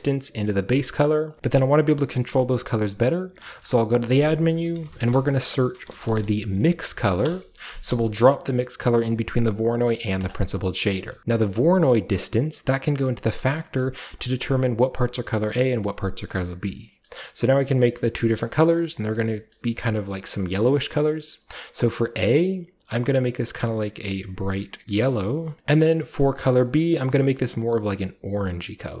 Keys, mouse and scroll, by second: 1.3 click, 1.4 x, 2.7-3.4 scroll up 1, 3.4-3.9 scroll up 1, 3.9 shift+click, 4.6-7.7 typing, 10.1-13.4 drag, 11.1-13.4 middle drag, 11.1-13.4 scroll up 1, 14.2 middle click, 16.4-16.9 middle drag, 16.9-18.1 scroll up 2, 17.0-17.4 middle drag, 18.1 middle click, 18.1-19.0 scroll up 1, 19.0 scroll up 1, 21.9 click, 23.1 click, 24.0-25.6 scroll up 1, 24.3 click, 25.6 alt+Left, 26.6-29.0 middle drag.